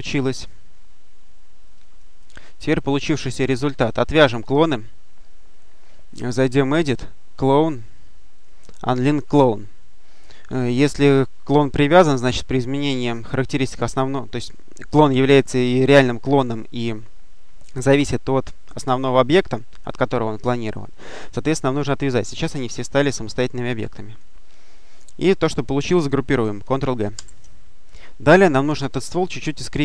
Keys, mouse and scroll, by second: 0.3-2.3 drag, 6.2 click, 10.0 click, 10.7 click, 22.6-24.5 drag, 27.0 ctrl+g.